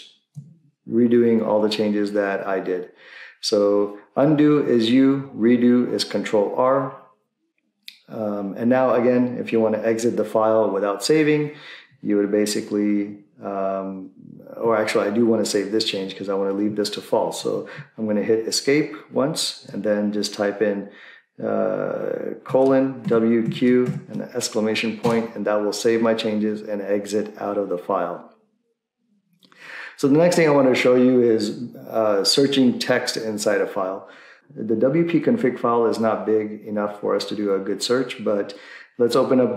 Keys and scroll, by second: 17.4 Escape, 22.3-24.4 typing, 25.0 Return, 29.9 Return.